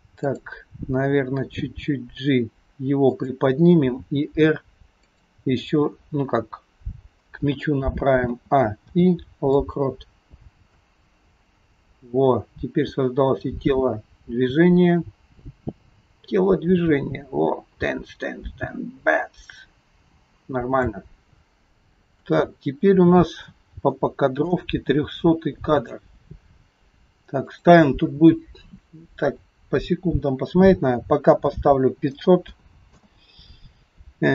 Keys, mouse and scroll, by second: 0.3 click, 1.8 g, 4.0 r, 8.3 a, 8.9 i, 10.9 click, 22.4 shift+middle click, 24.0 middle click, 25.7 click, 27.5 click, 32.5 KP_0.